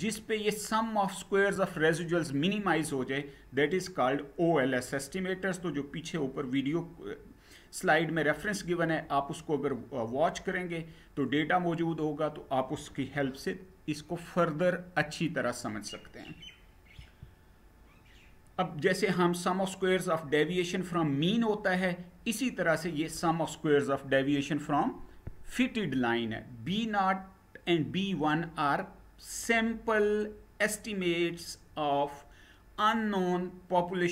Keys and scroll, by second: 16.6 Down.